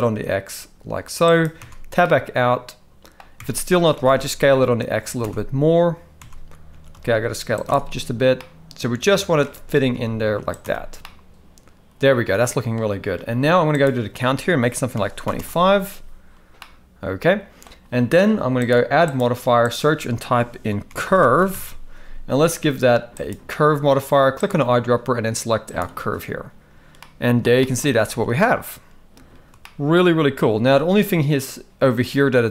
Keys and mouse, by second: 1.6 Tab, 2.0-3.2 middle drag, 3.4 Tab, 4.0 s, 5.2 Tab, 6.2 Tab, 6.7 s, 7.7 Tab, 8.4-9.4 middle drag, 9.4 Tab, 9.7 s, 10.6 Tab, 11.0-12.7 middle drag, 13.8-15.3 drag, 16.6-17.6 middle drag, 18.5 click, 19.2-23.3 drag, 24.4 click, 27.0-27.4 middle drag, 27.6 shift+middle drag, 28.2 alt+a, 29.6-29.9 shift+middle drag.